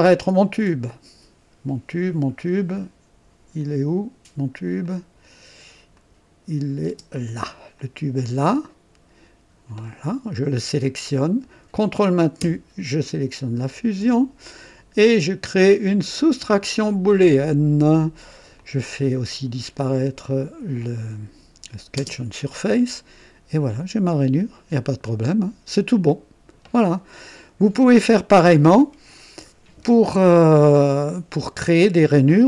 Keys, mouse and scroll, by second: 3.6 click, 4.8 click, 5.9 click, 6.8 space, 7.8-10.0 drag, 9.0 typing, 10.8 click, 13.6 ctrl+click, 16.1 click, 17.3 click, 18.6-19.5 drag, 20.8 click, 22.0 space, 22.5-28.4 drag.